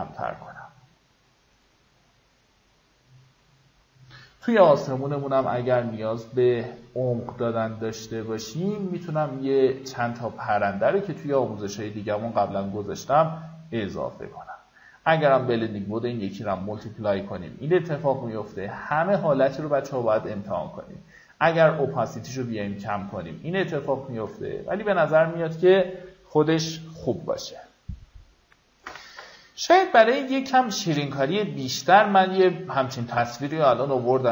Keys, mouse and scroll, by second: 10.3 ctrl+click, 11.9-24.7 drag, 26.5-26.9 alt+scroll down 1, 27.0 alt+scroll up 1, 29.0 F9, 30.9-34.3 drag.